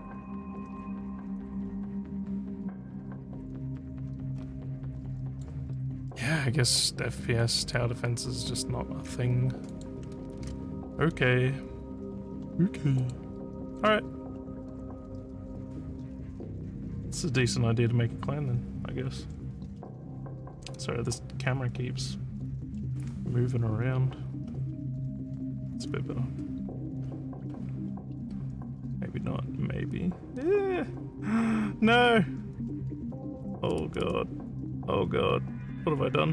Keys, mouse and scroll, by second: 2.0 scroll down 1, 3.8 scroll down 2, 4.3 scroll up 5, 5.3 click, 9.7 click, 10.3 ctrl+w, 13.0 click.